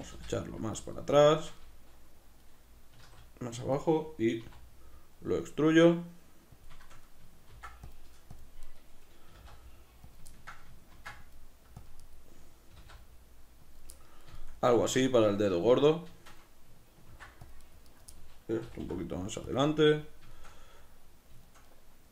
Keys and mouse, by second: 0.9 click, 0.9-3.7 middle drag, 2.9 s, 3.7 click, 4.4 e, 6.7 click, 6.9-8.4 shift+middle drag, 7.5 ctrl+r, 8.4 click, 8.7 right click, 9.3 g, 10.2 click, 10.3-11.9 ctrl+middle drag, 10.9 ctrl+r, 11.9 click, 12.0 right click, 12.7 g, 13.8 click, 13.9-17.7 middle drag, 17.1 ctrl+r, 17.7 right click, 18.7 middle click, 18.7 g, 19.6 click, 19.7-22.1 middle drag.